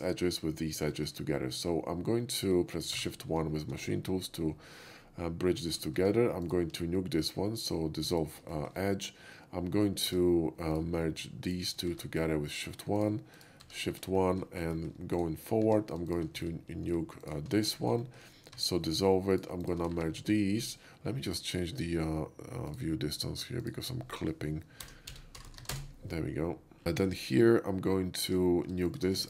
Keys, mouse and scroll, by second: 1.0 shift+middle click, 3.0 shift+1, 4.3 middle click, 5.1-5.8 shift+middle drag, 6.0 Tab, 6.5 click, 6.7 x, 8.1 click, 8.5 shift+middle click, 10.1 Tab, 10.7 click, 11.5 shift+click, 11.9 shift+1, 12.5 click, 13.0 ctrl+shift+click, 13.4 shift+click, 13.6 shift+1, 14.1 shift+Caps_Lock, 14.2 middle click, 14.8 middle click, 15.2 right click, 15.7 Tab, 16.1 click, 16.4 x, 17.3 click, 17.6 x, 17.7 click, 18.0 middle drag, 18.6 Tab, 19.3 click, 19.7 shift+click, 20.0 shift+1, 20.2 middle click, 20.5 shift+1, 21.0 shift+middle click, 22.7 shift+click, 23.6 click, 25.1 0, 25.2 ., 25.5 0, 25.6 1, 25.7 Return, 26.9 shift+middle click, 28.3 Tab, 28.9 click, 29.2 x.